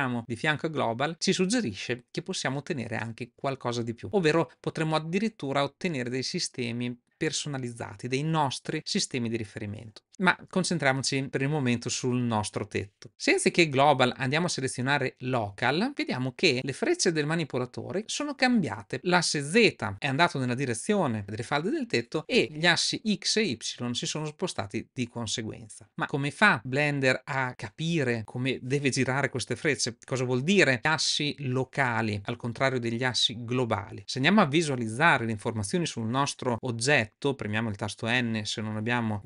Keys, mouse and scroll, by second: 34.0 n, 38.0 n.